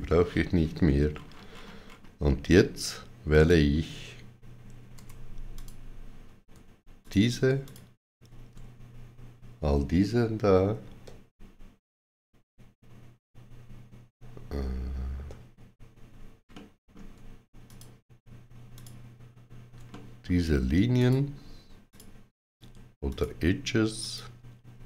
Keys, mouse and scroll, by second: 1.0-1.4 scroll up 4, 3.2 click, 4.8 2, 5.4 click, 6.9 shift+click, 7.5 shift+click, 10.8 shift+w, 15.0 alt+z, 15.0 shift+click, 15.0 shift+w, 16.3 alt+z, 16.4 middle click, 17.5 shift+click, 18.6 shift+click, 19.7 middle click, 20.8 shift+click, 21.7 shift+click.